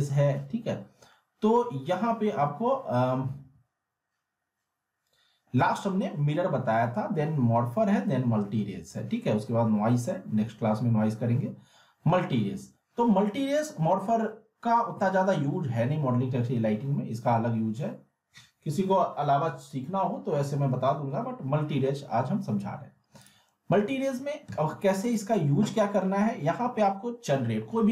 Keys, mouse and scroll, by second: 2.3 scroll up 1, 3.4 m, 23.2 click.